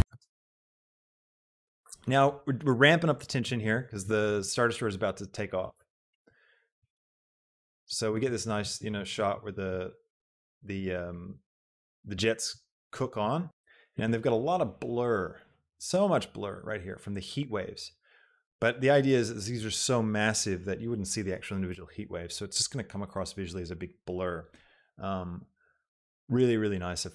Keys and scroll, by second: 0.0 space.